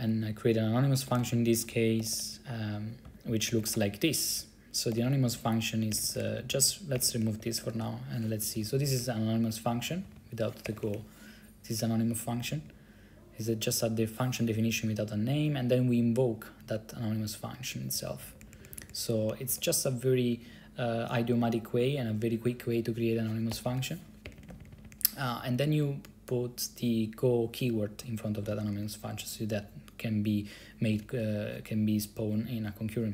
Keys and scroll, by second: 0.9-5.6 typing, 6.0 Right, 6.3 Right, 6.4 Right, 6.5 Right, 6.6 Right, 6.8 Right, 7.2-7.9 typing, 8.5 Left, 8.7 Left, 8.8 Left, 8.9 Left, 9.0 Left, 9.1 Left, 9.8 Left, 9.9 Left, 10.0 Left, 10.2 Left, 10.3 Left, 10.8 BackSpace, 10.9 BackSpace, 11.0 BackSpace, 12.4 Right, 12.5 Right, 12.7 Right, 12.8 Right, 14.6 Right, 14.7 Right, 14.8 Right, 14.9 Right, 15.5 Right, 15.7 Right, 18.0 Left, 18.2 Left, 18.3 Left, 18.5 Left, 18.6 Left, 18.7 Left, 18.8 Left, 18.9 Left, 19.6 Left, 23.4-24.2 typing, 24.4 Right, 24.5 Right, 24.6 Right, 24.7 Right, 24.8 Right, 25.0-26.7 Right, 28.6 Right, 28.8 Right, 28.9 Right, 29.7 Left, 31.1 Right, 31.2 Right.